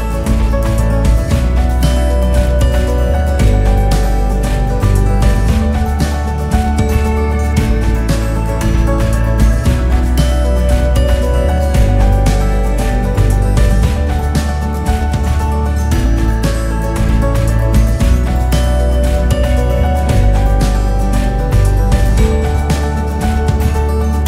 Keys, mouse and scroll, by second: 0.0 s, 4.3 r, 12.1 g, 15.0 r, 18.6 g, 20.9 s, 23.4 g.